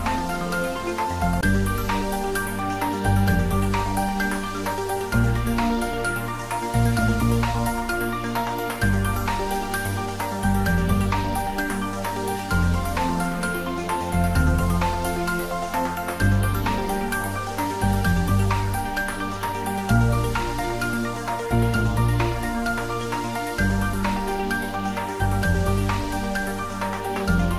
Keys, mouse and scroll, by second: 0.2 click, 1.3 shift+click, 2.6 g, 2.9 y, 4.1 g, 6.3 click, 6.8-9.2 middle drag, 9.2-11.1 drag, 10.9-12.0 typing, 13.8 click, 14.2 scroll down 1, 14.8 middle click, 15.6-16.1 scroll down 1, 16.7 click, 17.7-18.8 typing, 20.1 click, 20.4 scroll down 1, 20.7-22.7 middle drag, 22.5-23.4 typing, 25.1 click, 26.5-26.9 scroll up 1.